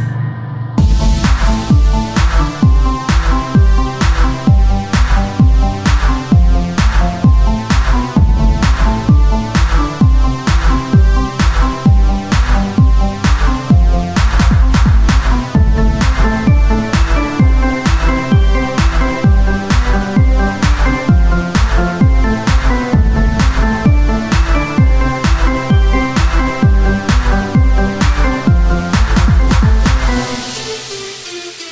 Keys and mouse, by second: 0.0 click, 0.3 Tab, 2.1 Tab, 3.7 Tab, 8.2 Tab, 9.5 KP_1, 9.9 z, 12.6 z, 14.0 ctrl+r, 16.8 s, 23.8 Tab, 23.8 click, 27.7-29.7 drag, 29.9 Tab.